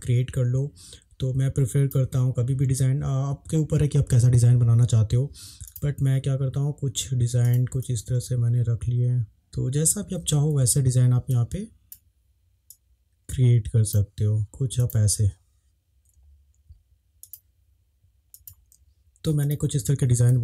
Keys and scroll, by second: 10.5 ctrl+z, 10.5 ctrl+z, 20.3 Up.